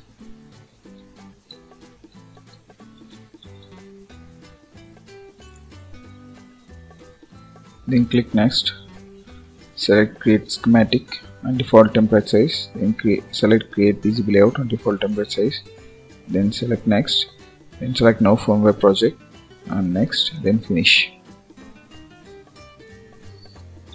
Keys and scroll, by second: 3.3 Return.